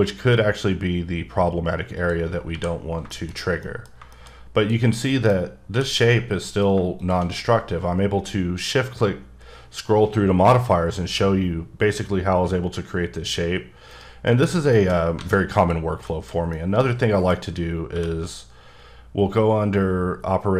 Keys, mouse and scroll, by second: 2.0 click, 2.3-2.8 scroll down 4, 2.5 h, 3.1 shift+middle click, 3.3-3.6 scroll down 1, 3.6 middle click, 3.9 scroll down 2, 4.1 shift+middle click, 4.6 click, 4.9 middle click, 5.7 q, 7.0 shift+click, 8.2-8.7 scroll up 3, 9.4-10.7 scroll up 6, 11.0-11.4 scroll down 4, 11.4-12.2 scroll up 6, 12.2-12.9 scroll down 5, 12.9-13.9 scroll up 6, 13.9 right click, 14.3 middle click, 15.2 alt+a, 15.6 click, 16.1 shift+middle click, 17.4-17.9 scroll up 1, 17.9 q.